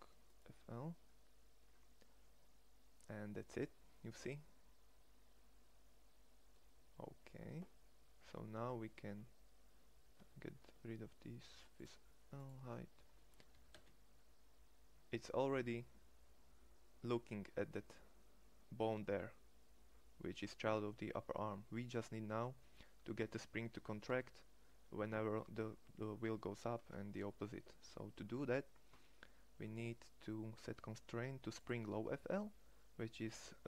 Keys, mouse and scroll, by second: 2.2 middle click, 2.5 middle click, 5.8 middle click, 6.0-7.8 middle drag, 9.1 Tab, 10.2 Tab, 10.7 Tab, 13.6 g, 15.5-15.8 drag, 23.8 g, 24.5-25.3 drag.